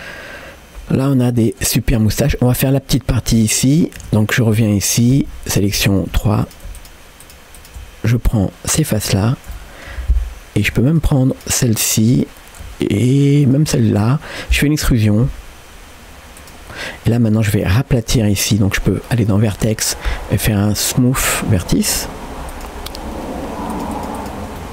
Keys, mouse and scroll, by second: 0.0-1.7 middle drag, 2.2-2.5 scroll up 1, 4.0 Tab, 5.2 4, 6.1 3, 6.4-8.1 drag, 8.1 scroll up 2, 8.4 middle click, 9.3 scroll down 1, 9.6 shift+middle click, 10.2 scroll up 1, 10.9 shift+click, 12.2 middle click, 13.5 shift+click, 13.9 middle click, 15.4 e, 17.2 click, 17.5 middle click, 19.1-21.3 drag, 22.5-24.3 drag, 24.6 middle click.